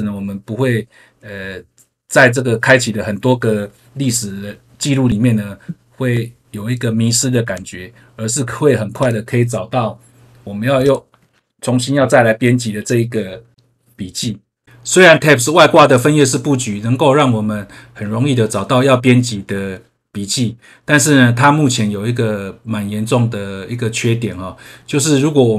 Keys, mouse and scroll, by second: 7.4 w, 8.9 click, 10.7 click, 11.9 BackSpace.